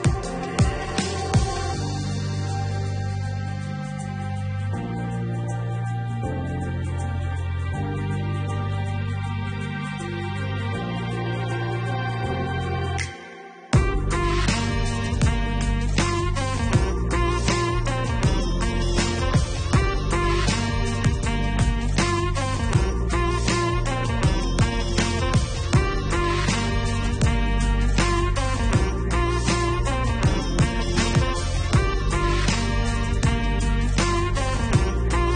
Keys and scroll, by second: 11.7-13.5 typing, 14.8 Return.